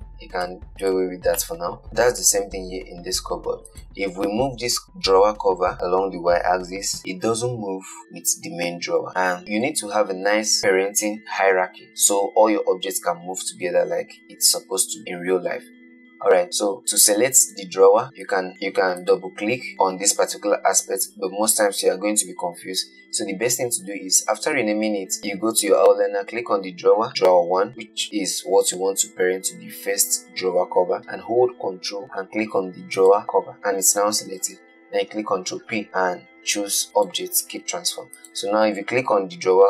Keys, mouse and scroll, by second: 0.7 x, 1.7 shift+middle click, 1.8 scroll down 3, 2.0-3.9 shift+middle drag, 3.9 click, 5.2 g, 9.4-10.6 scroll down 2, 16.8 click, 17.7 click, 18.5 click, 19.2 click, 33.2 ctrl+click, 35.7 ctrl+p, 38.4 click.